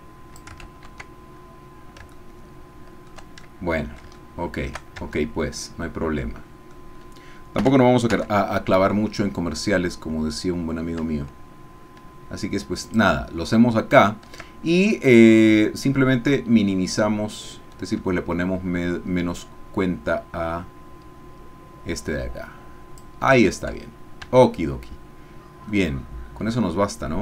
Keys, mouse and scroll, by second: 0.6 ctrl+z, 2.1-3.2 shift+drag, 3.5 shift+click, 4.2 shift+click, 5.0 shift+Tab, 5.6-6.8 drag, 7.6 g, 8.1 x, 12.9 shift+click, 13.4 shift+click, 15.3-23.2 drag, 24.2 Tab, 25.7-27.2 drag.